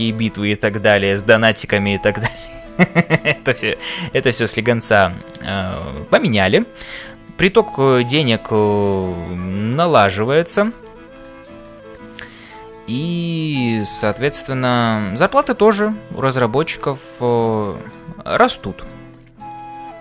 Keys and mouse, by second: 5.3 middle click, 6.8 shift+middle click, 7.2 middle click, 8.8-10.4 middle drag, 11.2 shift+middle click, 12.7 shift+middle click, 13.1 middle click, 14.4 ctrl+s, 15.2 middle click, 15.7-17.4 middle drag, 17.6 middle click, 19.3-20.0 middle drag.